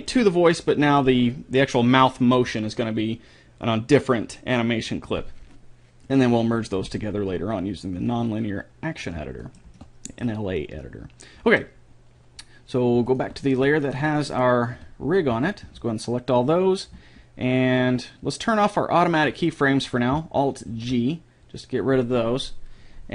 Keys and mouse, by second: 0.7-1.9 right drag, 1.9-3.3 middle drag, 8.3-10.1 drag, 9.5 middle click, 9.5 right click, 13.1-15.1 drag, 14.4-16.1 right drag, 14.7 a, 15.3 a, 19.2-20.7 drag, 20.7 alt+g.